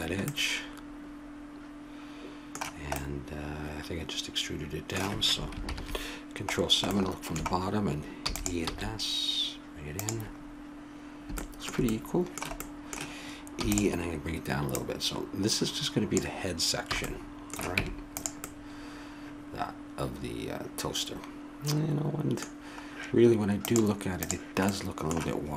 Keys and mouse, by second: 1.2 middle click, 3.1-4.2 middle drag, 5.6 ctrl+KP_7, 8.2 e, 8.6 s, 10.4 middle click, 11.4-13.0 middle drag, 13.6 e, 14.7-16.6 drag, 16.9 a, 17.1 middle click, 17.8 Tab, 22.6-23.6 middle drag, 23.6-25.4 drag, 25.4-25.5 middle drag.